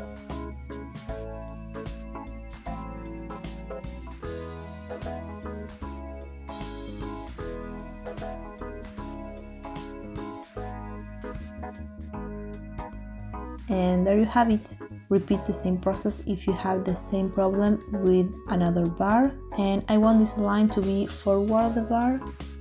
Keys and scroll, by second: 12.9 Tab.